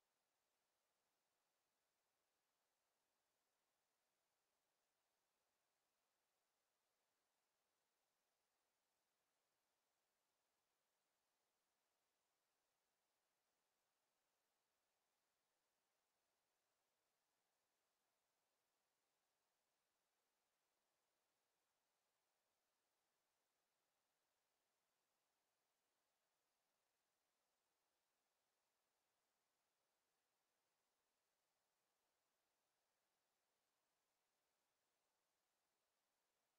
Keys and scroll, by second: 8.7 d, 10.5 w, 14.7 d, 17.1 w, 18.2 d, 21.2 w, 30.4 Escape.